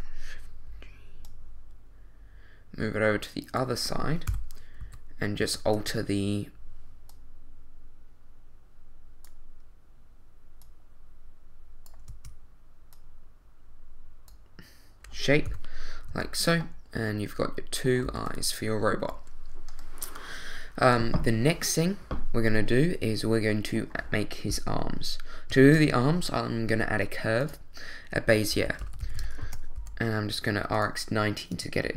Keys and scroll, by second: 4.3 7, 4.8 z, 5.7 Tab, 12.1 Tab, 16.1 z, 18.0 a, 24.7 l, 25.6 shift+a, 28.5-29.8 typing, 29.4 Return, 31.5 Tab.